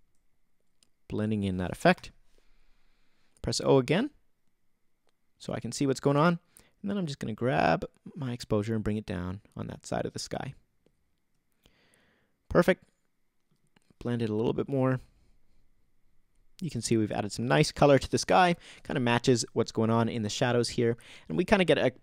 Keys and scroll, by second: 1.9 alt+o, 2.6 o.